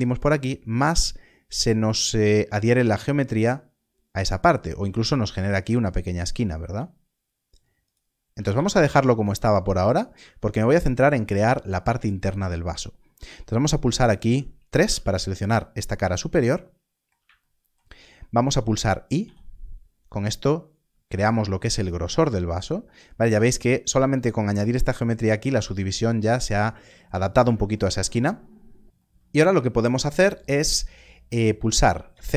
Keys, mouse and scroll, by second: 7.8-8.4 scroll up 1, 8.4 ctrl+z, 14.8 3, 15.4 click, 21.7 i, 21.7 click, 32.0 z.